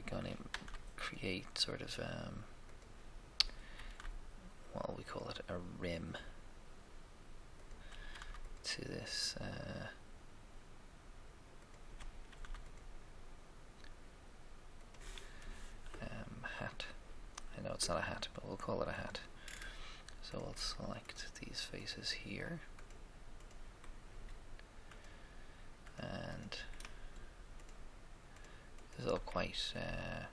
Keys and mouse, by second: 0.4 ctrl+r, 0.5 ctrl+r, 3.7 ctrl+r, 3.8 ctrl+r, 8.1 ctrl+r, 8.1 ctrl+r, 12.2 ctrl+r, 12.3 ctrl+r, 18.9-20.7 drag, 20.3-24.4 right drag, 23.8 shift+click, 24.4-25.8 shift+middle drag, 25.8-26.8 shift+right drag, 26.8-28.8 shift+middle drag, 28.8 shift+right click, 29.3-30.3 shift+middle drag.